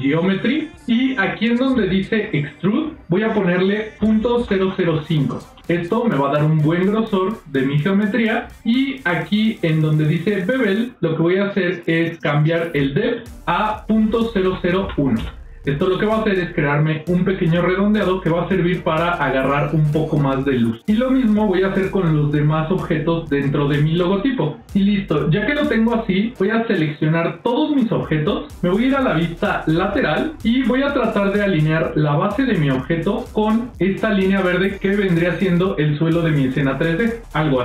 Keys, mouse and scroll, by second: 2.6-5.5 drag, 4.5 KP_0, 5.5-6.8 scroll up 1, 13.1-15.6 drag, 14.3 KP_0, 26.4-27.5 drag, 29.6 KP_3, 30.8 ctrl+middle click, 37.1 g.